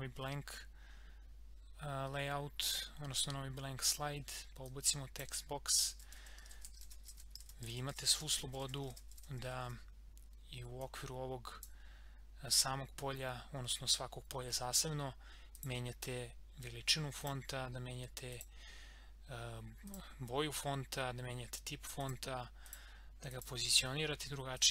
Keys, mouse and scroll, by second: 3.8 click, 5.6-10.2 typing, 10.8-14.0 drag, 15.6 click.